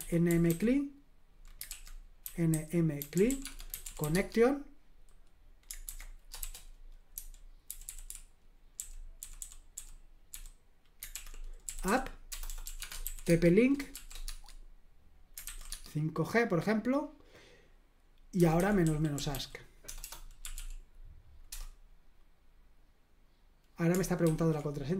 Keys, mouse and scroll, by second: 0.0-0.9 typing, 1.7 super+l, 2.0-4.5 typing, 5.8 super+h, 6.4-10.3 typing, 11.2 super+l, 11.4-14.6 typing, 15.7 Tab, 15.7 typing, 18.1-21.0 typing, 21.5 Return, 24.2 ctrl+c.